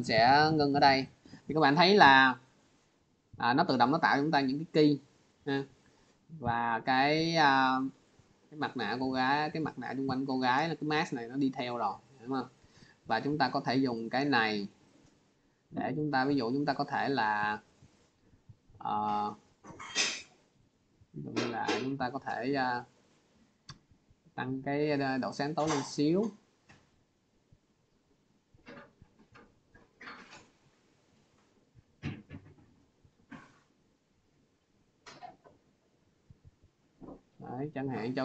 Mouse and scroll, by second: 1.2-1.9 drag, 2.4 click, 5.3 click, 5.7 click, 6.6 click, 7.8 click, 9.4 click, 10.3 click, 10.8 click, 11.9 click, 12.4 click, 13.2 click, 13.9 click, 16.1 click, 19.9-21.2 drag, 22.0-27.2 drag, 28.6 click, 31.0 click.